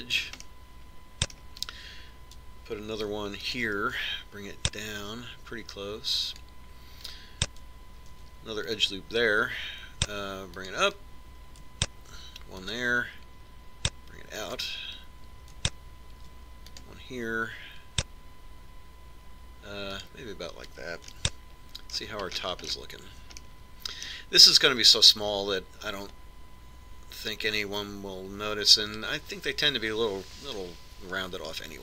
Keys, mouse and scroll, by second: 1.5-3.3 middle drag, 4.1 ctrl+r, 9.3 ctrl+r, 13.3 ctrl+r, 17.3 ctrl+r, 22.3-27.7 middle drag.